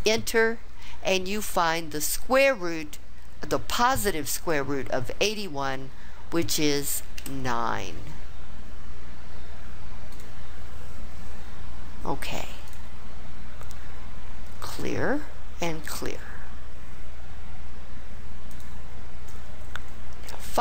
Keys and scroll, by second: 0.0 Return.